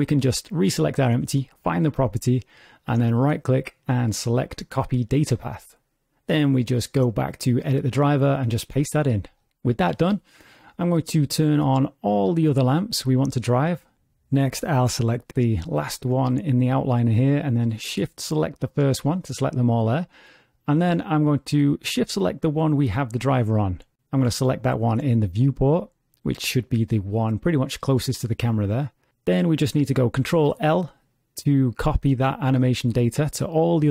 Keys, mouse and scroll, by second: 3.2 right click, 6.6 click, 7.4 right click, 12.2 click, 12.4 click, 12.8 click, 12.9 click, 13.1 click, 13.2 click, 13.3-14.3 scroll down 4, 13.8 click, 16.1 click, 17.1-18.3 scroll up 6, 18.4 shift+click, 19.1 scroll down 4, 19.6 shift+click, 20.2-20.7 scroll down 4, 22.9 shift+click, 24.3 shift+click, 27.6 shift+middle click, 28.4-28.8 scroll down 1, 29.0 shift+middle click, 30.3 ctrl+l.